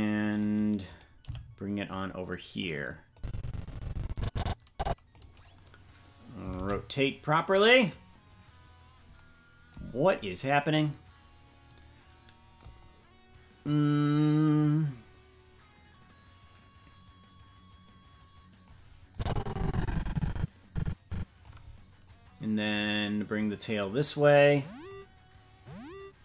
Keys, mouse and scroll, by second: 0.3 right click, 1.2 g, 3.1-5.1 drag, 6.6 alt+r, 9.8-10.2 scroll down 4, 13.6-18.7 drag, 19.1-21.5 drag, 22.7-24.9 drag, 25.6 click.